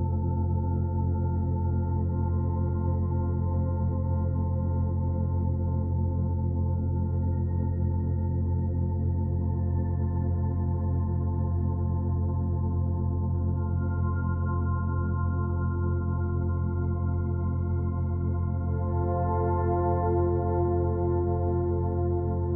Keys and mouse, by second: 0.2 shift+d, 1.6 shift+click, 2.3-6.8 drag, 7.6 click, 9.2-15.8 drag, 16.5-20.0 drag, 20.1 click.